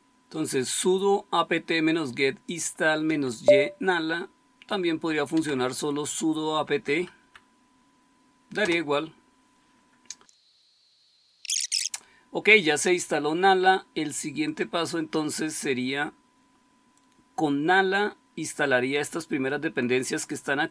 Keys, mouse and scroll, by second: 2.9 Right, 4.0 Left, 4.4 Left, 4.5-5.0 Left, 5.3 Left, 6.5 Delete, 6.7 Delete, 6.9 Delete, 7.1 Delete, 8.5 Return.